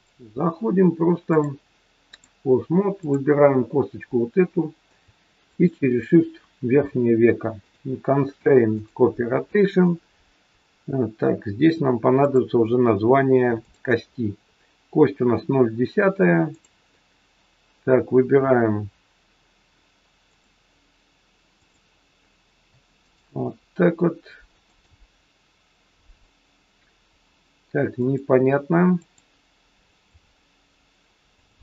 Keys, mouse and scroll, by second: 1.3 click, 3.0 click, 4.0 scroll up 1, 5.4 shift+click, 7.6 click, 12.3 click, 13.6 click, 16.6 click, 20.2 click, 21.6 click, 23.0 shift+click, 24.6 click, 27.9 click, 28.9 click, 29.8 click, 31.3 click.